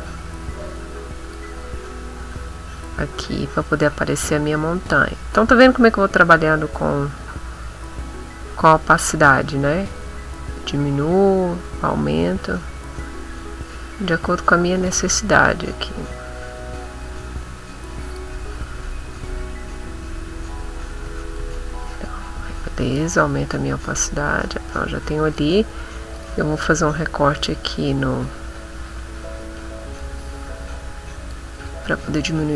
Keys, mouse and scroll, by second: 1.2 click, 2.7-18.3 drag, 19.3 ctrl+x, 20.7 middle click, 21.4 ctrl+shift+a, 22.9 click, 24.5 middle click, 26.1 click, 30.0-31.5 drag, 32.1 click.